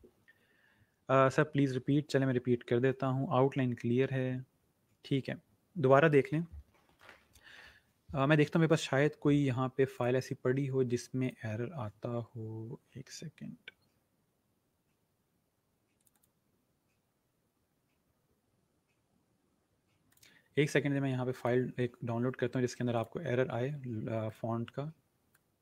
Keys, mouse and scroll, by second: 8.6 click, 12.3 scroll down 1, 15.9 click, 17.7 scroll down 1, 18.4 scroll, 18.5-18.9 scroll up 1, 20.0 click.